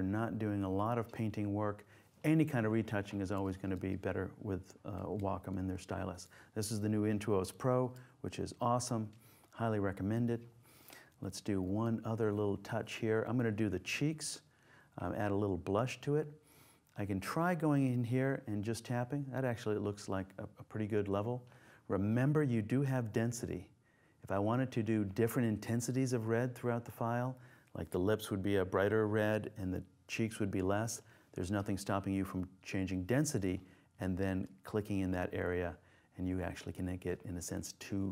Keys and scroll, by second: 8.6 super+0.